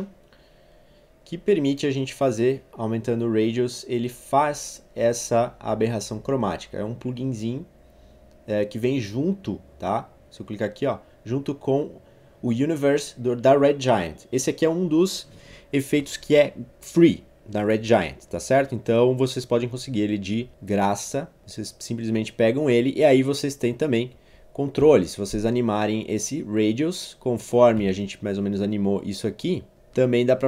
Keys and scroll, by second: 24.8 0, 27.8 u.